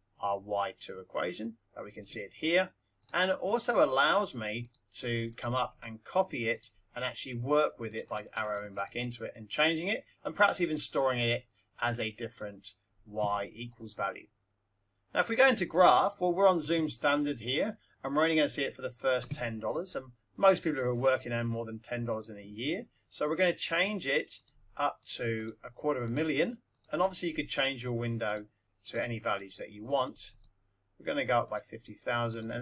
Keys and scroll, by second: 4.5 Up, 6.5 Return, 7.9 Left, 23.7 0, 24.4 Return, 25.0 2, 25.4 5, 26.0 0, 28.2 Return, 28.8 5, 29.3 0, 31.4 Return, 32.3 0.